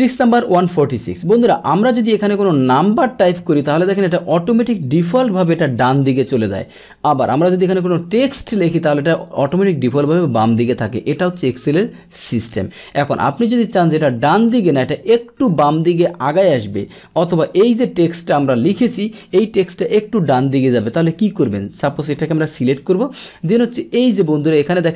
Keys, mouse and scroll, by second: 0.0 alt+Tab, 1.0 click, 1.7 click, 4.8 click, 5.8 click, 7.2 click, 8.6 click, 9.5 click, 11.2 click, 12.4 click, 13.2 click, 17.5 click, 20.9 click, 22.0 click.